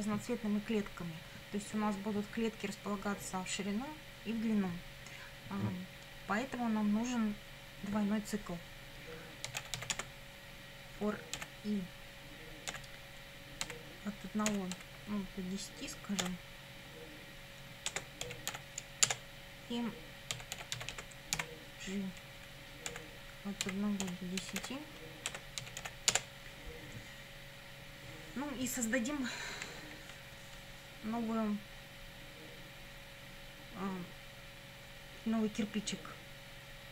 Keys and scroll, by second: 9.3-10.3 typing, 11.4 i, 12.7-15.2 typing, 16.2 0, 17.9 space, 18.3 d, 18.5 o, 19.1 Return, 20.1-21.4 typing, 22.9-26.4 typing.